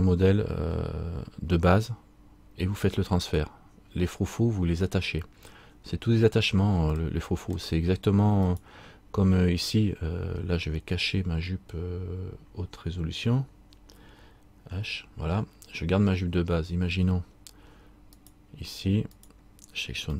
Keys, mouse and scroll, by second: 6.0-7.0 scroll up 3, 7.0 scroll up 1, 7.1 middle click, 8.6 right click, 16.0-18.2 scroll down 1, 18.3 right click.